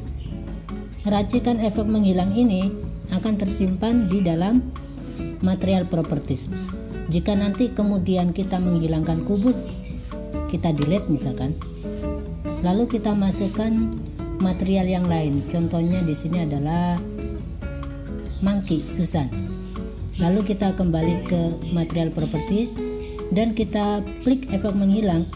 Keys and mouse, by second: 0.1 click, 3.4 click, 6.4 click, 10.9 Delete, 14.0-18.9 drag, 22.7-25.0 drag.